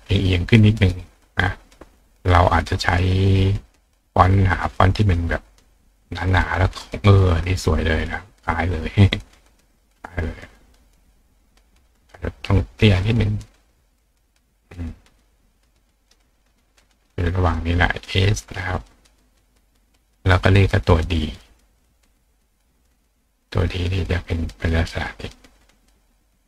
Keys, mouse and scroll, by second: 1.0 click, 2.4 click, 6.1 click, 7.7-9.7 drag, 10.5-11.6 drag, 12.2 click, 13.0 click, 13.7 click, 14.9-16.1 drag, 18.3 click, 20.1 click, 20.9 click, 21.8 click, 23.0-26.4 drag.